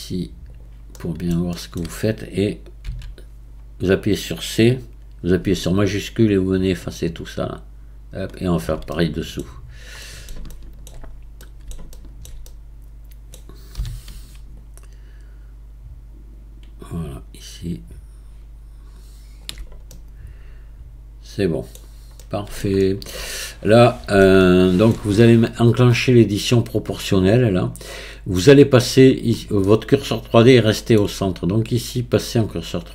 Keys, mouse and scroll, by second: 0.5 click, 1.0-2.8 middle drag, 2.8 c, 8.9 middle click, 9.6-10.0 scroll down 3, 10.0-11.1 middle drag, 11.1-11.4 scroll up 2, 11.4-13.8 middle drag, 13.8 c, 19.9-21.8 middle drag, 21.8-22.2 scroll down 3, 22.2-27.2 middle drag, 27.2 click, 29.6-32.6 middle drag, 32.8-32.9 drag.